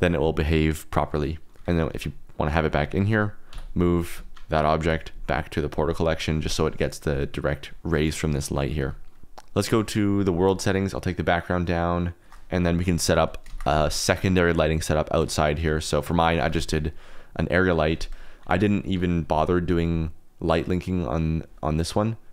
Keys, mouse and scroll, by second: 1.9 g, 2.6 click, 3.5 ,, 4.8 m, 8.7 g, 9.4 click, 10.5-12.1 shift+drag, 12.7 middle drag, 13.4 shift+a, 16.4 g, 16.5 z, 17.6 click, 18.2 click, 19.6 click.